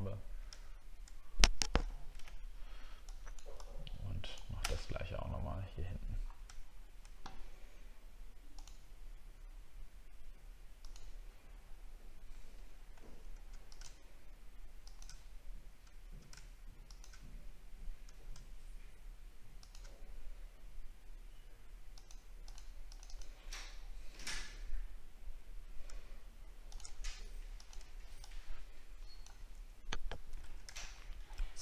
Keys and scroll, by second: 0.7 alt+scroll down 1, 1.9 alt+scroll down 1, 4.9 alt+scroll up 7, 5.4 alt+scroll up 1, 6.5 alt+scroll down 1, 30.4 ctrl+d, 30.8 alt+scroll down 1.